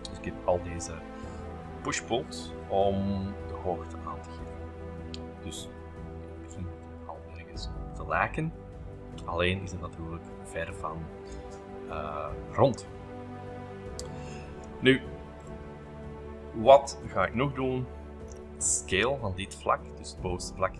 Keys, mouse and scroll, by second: 0.0-3.2 middle drag, 4.3 space, 5.1 middle click, 5.4-6.4 scroll up 4, 6.4 middle click, 6.8 scroll, 8.4-9.1 scroll up 2, 9.6 middle click, 12.5-13.7 shift+middle drag, 13.9 l, 14.7 space, 15.4 click, 16.4 shift+middle click, 17.1 shift+click, 18.3 s, 19.7 middle click, 19.7-20.5 scroll up 2.